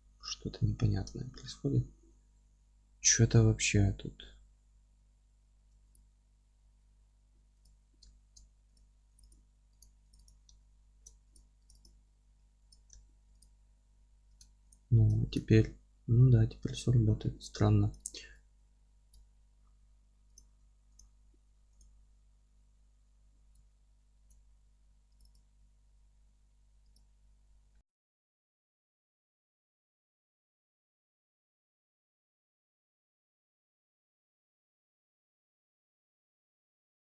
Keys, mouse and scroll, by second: 0.8 scroll up 2, 1.1 alt+z, 2.6 alt+q, 5.9 click, 7.6 Delete, 8.0-8.7 alt+middle drag, 9.2 click, 10.1 click, 10.5 alt+middle click, 11.7 click, 12.7 Delete, 12.9-13.4 alt+middle drag, 13.4 click, 13.9 a, 14.7 click, 15.2 alt+e, 16.5 Escape, 17.2 2, 18.0 click, 18.4 ctrl+x, 19.1 z, 20.3 click, 21.5 3, 21.7 click, 23.6 ctrl+x, 24.7 2, 25.2 click, 25.6 f, 26.9 click, 27.7-28.3 alt+middle drag, 28.3-28.9 drag, 28.9-33.3 middle drag, 30.2 x, 30.5 ctrl+z, 31.4 x, 32.0 alt+e, 32.4 Escape, 32.4 scroll down 1, 32.7 scroll up 1, 32.8 ctrl+z, 33.3 click, 33.4 3, 33.5 click, 33.6-36.4 alt+middle drag, 33.7 alt+q, 34.4-35.6 scroll down 1, 36.0 2, 36.4 click, 36.7 g.